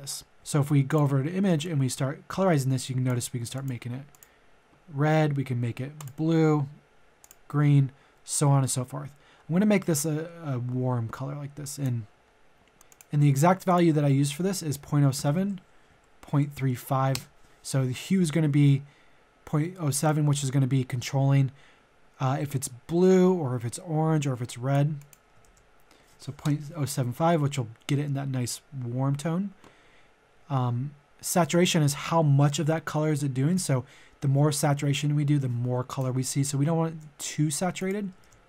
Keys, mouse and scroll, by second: 12.2-12.8 scroll up 1, 12.8 click, 14.0 ctrl+v, 15.2 Tab, 15.9 KP_Decimal, 16.3 KP_3, 20.0 click, 21.6-24.9 drag, 25.8 ctrl+v, 26.4 Return, 33.5-36.5 drag, 36.8 ctrl+z, 37.7 click, 38.2 ctrl+v.